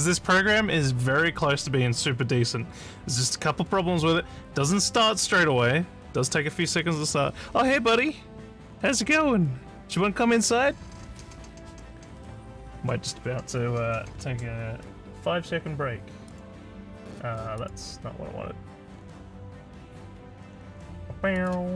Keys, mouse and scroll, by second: 16.3 click, 17.6 click, 19.9 scroll up 1, 21.4 click.